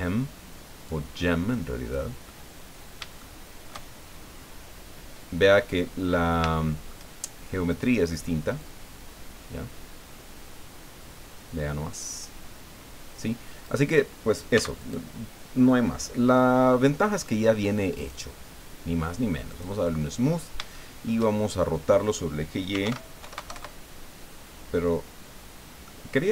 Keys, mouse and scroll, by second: 0.8-2.1 drag, 2.2 middle click, 5.6 middle click, 6.5 shift+middle click, 7.7 right click, 8.6-12.4 drag, 13.6 right click, 14.5 x, 14.8 click, 16.5 scroll down 1, 16.9 middle click, 18.0 right click, 19.5 click, 20.3 scroll up 1, 20.7 shift+middle click, 22.5-23.3 typing, 23.5 KP_Enter, 25.3 scroll down 1, 25.9-26.3 middle drag.